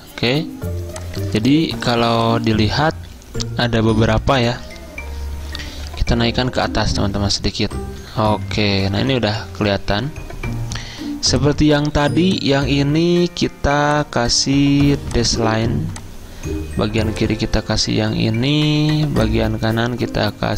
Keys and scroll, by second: 8.1 Up, 8.2-8.8 typing, 9.7 Up.